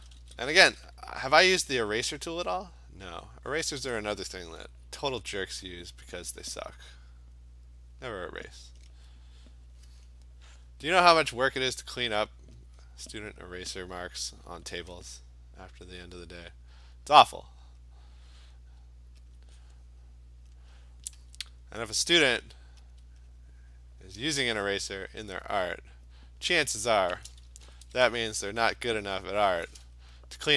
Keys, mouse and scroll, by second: 0.0-0.6 typing, 1.8 click, 2.9 click, 3.3 click, 3.6 alt+click, 5.4 alt+click, 5.6 alt+click, 7.3 click, 7.9 click, 12.3 click, 12.6 click, 12.8 click, 12.9 click, 13.2 click, 13.5 click, 16.2 click, 16.7 click, 16.9 click, 17.6 click, 18.4 click, 19.3 alt+click, 20.5 alt+click, 21.2 alt+click, 22.9 alt+click, 24.8 click, 25.1 click, 25.5 alt+click, 26.2 click, 26.8 click, 27.6-28.6 typing, 28.8 click, 29.3 click, 29.7 click.